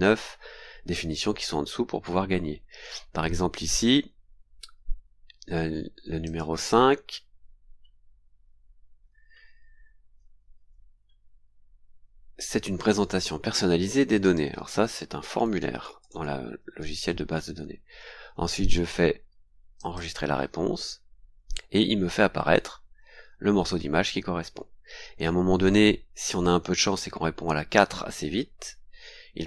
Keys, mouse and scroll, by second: 0.9-1.3 scroll down 2, 2.0-2.8 scroll up 4, 3.6-3.9 scroll up 2, 6.2 click, 7.4 scroll down 2, 8.3-8.7 scroll up 2, 9.0-9.6 scroll down 4, 11.7 scroll down 2, 14.2 click, 14.9-17.5 typing, 18.5-18.8 scroll up 2, 19.7 click, 21.7-22.6 scroll down 2, 27.1-27.9 scroll down 4, 28.3-28.6 scroll down 2.